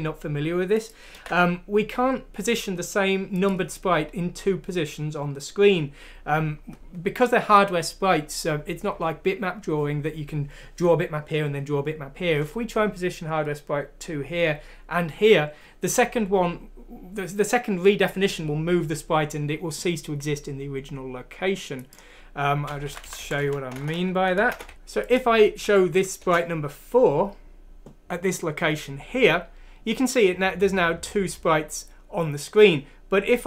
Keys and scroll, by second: 1.1 ctrl+v, 23.7-24.7 typing, 24.7 ctrl+z, 25.6 F6, 26.2 Return.